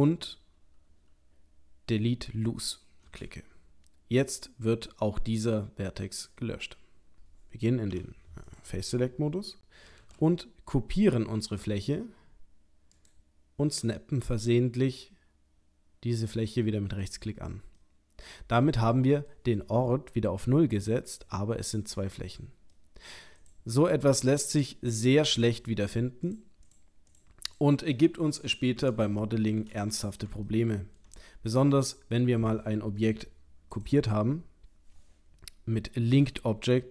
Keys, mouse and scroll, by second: 7.9 3, 8.5 click, 10.0 shift+d, 14.9 middle click, 17.8 middle click, 21.2 g, 22.8 middle click, 23.1 middle click, 23.4 click, 23.8 middle click, 24.8 click, 25.3 click, 25.8 click, 26.3 click, 26.7 click, 27.5 click, 27.9 middle click, 28.9 middle click, 29.2 shift+middle click, 29.6 shift+middle click, 29.8 middle click, 30.2 middle click, 30.5 ctrl+middle click, 33.7 click, 36.1 l.